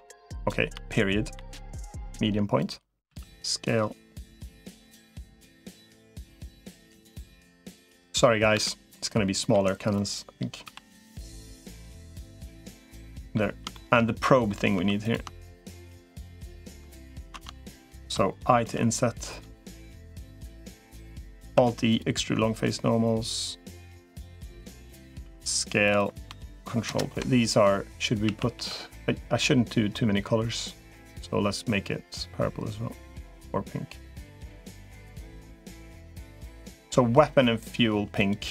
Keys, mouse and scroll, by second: 0.5-2.9 typing, 7.1 middle click, 8.3 KP_7, 9.3 g, 10.5 s, 12.5 middle click, 13.5 shift+middle click, 13.9 middle click, 14.7 3, 17.1 ctrl+z, 18.5 i, 19.6 middle click, 20.6 middle click, 21.3 alt+e, 25.1 s, 26.7 ctrl+KP_Add, 28.1 a, 28.3 g, 36.7 g.